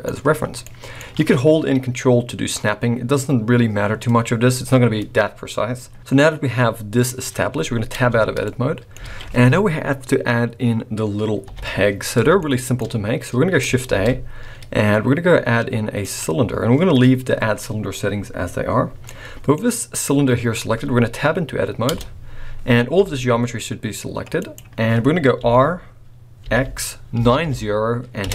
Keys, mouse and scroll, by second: 0.3 scroll down 1, 0.6 middle click, 4.2-5.1 scroll down 2, 7.9 Tab, 8.4 middle click, 9.1 alt+a, 11.4 KP_1, 12.4 shift+middle click, 12.8-13.6 scroll up 1, 13.6 scroll up 2, 13.8 shift+a, 17.9-19.0 scroll up 4, 19.0 middle click, 19.3 middle click, 21.9 Tab, 22.9 g, 25.4 r.